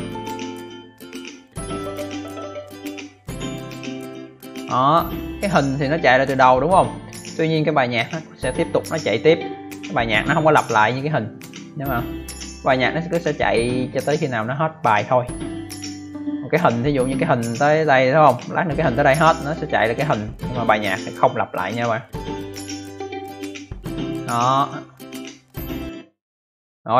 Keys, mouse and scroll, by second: 25.7 click.